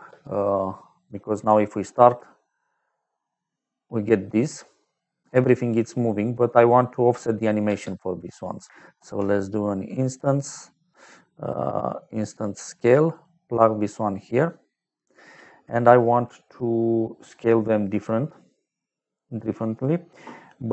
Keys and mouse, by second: 0.0 space, 1.0 middle click, 2.7 middle click, 7.6 space, 8.9 shift+a, 12.4 click, 13.0 click, 14.0 middle click, 15.0 click, 17.8 middle click, 19.4 middle click.